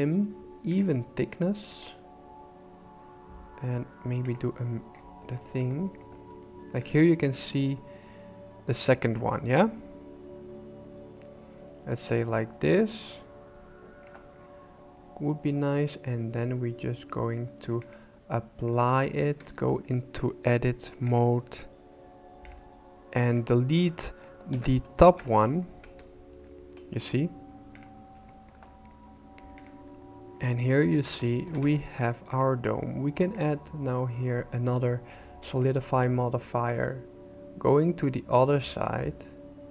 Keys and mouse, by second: 0.7 click, 4.2 click, 5.7 shift+middle click, 6.9-14.0 shift+drag, 18.0 click, 19.2 Tab, 22.4 click, 24.5 ctrl+l, 25.2 shift+c, 25.8 Tab, 27.7 click, 28.3 shift+middle click, 29.6 click, 30.8 shift+click, 30.9 shift+middle click, 31.5 alt+a, 32.3 click, 33.4-35.6 drag, 36.9-39.7 shift+drag.